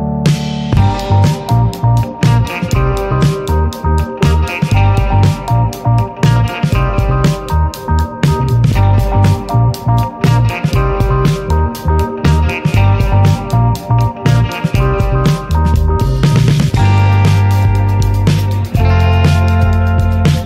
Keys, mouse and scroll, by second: 0.4 click, 1.2-2.8 drag, 3.9-5.2 drag, 5.7-6.1 drag, 6.5 scroll down 3, 6.9-8.3 middle drag, 8.3 ctrl+s, 8.6-9.1 middle drag, 9.1-9.8 scroll up 3, 9.8-10.6 shift+middle drag, 10.6 ctrl+s, 14.3 middle click, 14.5 click, 14.9 /, 15.0 middle click, 16.6 click, 17.0 click, 18.1 click, 20.1 click, 20.4 KP_0.